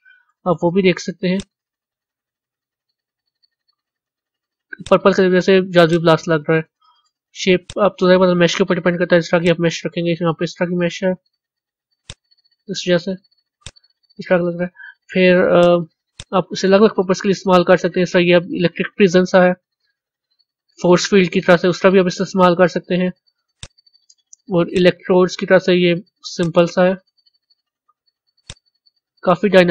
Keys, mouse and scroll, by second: 1.3-2.7 drag, 2.7-4.8 middle drag, 4.8 click, 7.5-9.4 drag, 12.0 z, 13.6 z, 15.5 click, 16.1 drag, 18.2-18.9 scroll up 4, 19.3-21.5 middle drag, 21.5 scroll up 1, 21.6-23.5 middle drag, 23.5 click, 24.7 click, 26.4 click, 29.6 scroll up 2.